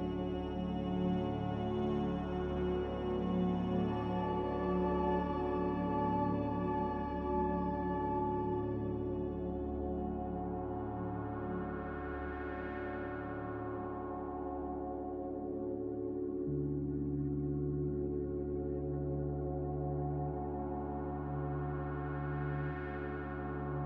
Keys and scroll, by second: 0.0 ctrl+z, 17.0 ctrl+z, 20.1 z, 20.6 5, 22.1 0.